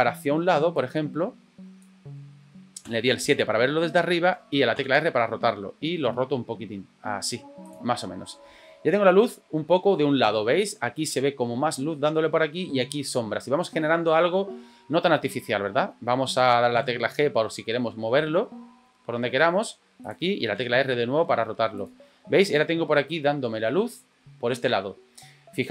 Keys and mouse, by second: 0.7-1.8 drag, 2.8 KP_7, 4.7 r, 16.7 g, 20.6 r.